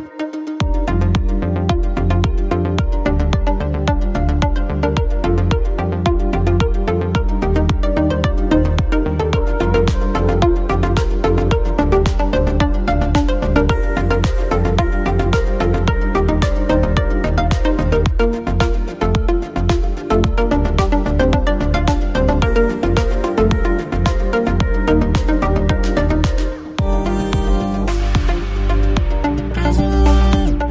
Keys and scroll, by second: 13.8 BackSpace, 17.8 Delete, 18.8 shift+c, 19.8 Left, 20.1 Return, 22.5 Return, 25.7 BackSpace, 29.9 shift+s.